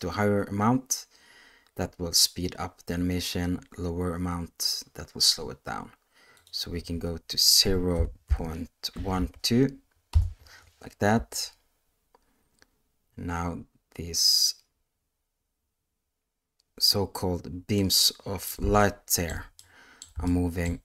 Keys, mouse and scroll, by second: 6.4-10.2 drag, 11.1 space, 17.7-18.4 middle drag, 18.7-19.2 shift+middle drag, 19.5-19.9 middle drag, 20.2-20.6 shift+middle drag.